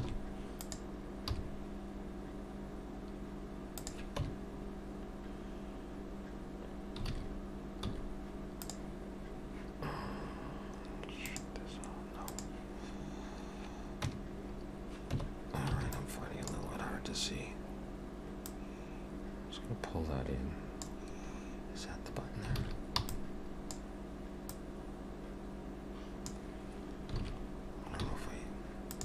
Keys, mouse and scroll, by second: 0.0 shift+d, 1.3 g, 4.2 Tab, 11.2 click, 12.3 click, 14.1 Tab, 15.3 Tab, 16.9-18.2 scroll up 3, 16.9 b, 18.5 click, 21.1-21.5 scroll down 3, 22.6 alt+a, 23.0 b, 24.5 click, 27.2 alt+a.